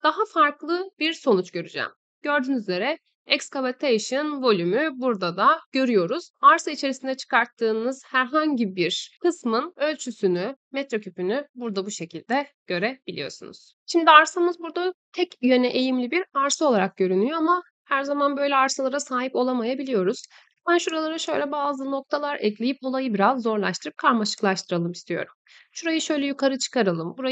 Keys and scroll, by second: 23.7 Escape.